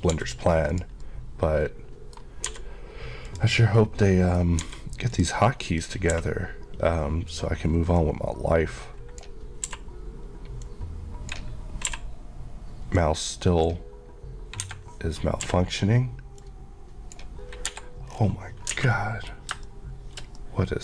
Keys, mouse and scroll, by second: 0.2 g, 0.7 click, 1.1 middle click, 2.5 g, 3.3 click, 3.6 middle click, 4.7 g, 5.2 click, 5.5 scroll up 1, 6.2 q, 8.0 click, 9.7 q, 10.7 click, 10.9 Left, 11.3 click, 12.0 q, 13.0 click, 14.6 Escape, 15.5 q, 16.4 click, 16.6 click, 17.8 Escape, 18.1 scroll down 1, 18.8 alt+a, 19.0 middle click.